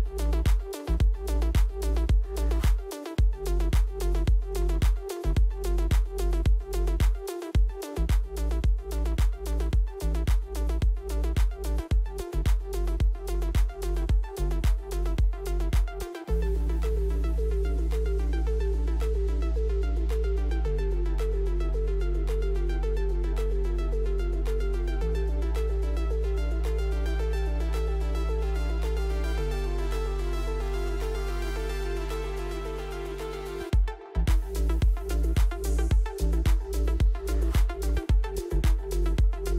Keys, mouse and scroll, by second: 0.5 click, 1.3 click, 3.3 click, 7.4 typing, 7.4 click, 9.4 ctrl+a, 11.3-12.1 typing, 15.2 click, 15.4 click, 18.8 click, 20.2-21.0 typing, 20.5 click, 21.7 click, 24.5 right click, 26.6 click, 28.2 click, 28.2 typing, 29.1 click, 32.3 typing, 33.0 click, 37.2 click, 39.1 click.